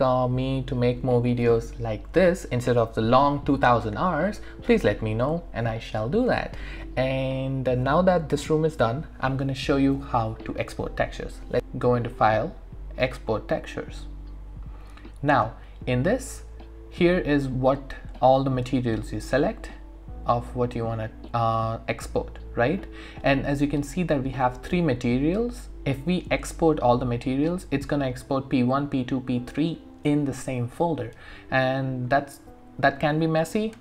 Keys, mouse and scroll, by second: 12.1 click.